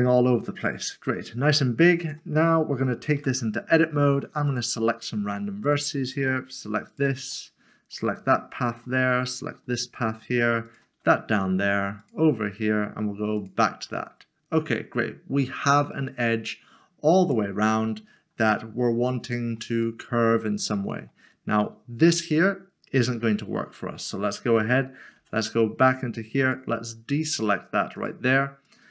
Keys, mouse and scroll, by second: 1.4 Return, 3.2 Tab, 4.5 Tab, 5.6 ctrl+l, 6.9 ctrl+l, 7.5 middle click, 8.7 ctrl+click, 9.1 middle click, 10.7 ctrl+click, 12.0 ctrl+click, 13.4 ctrl+click, 14.0 ctrl+click, 14.9 middle click, 17.2 click, 17.7 middle click, 19.1 shift+middle click, 19.8 middle click, 24.6 Tab, 26.4 ctrl+l.